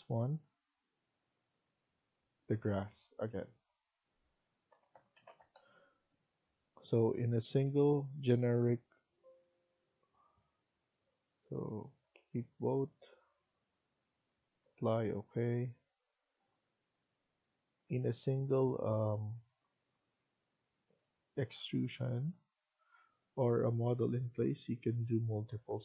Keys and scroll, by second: 4.4-5.9 typing.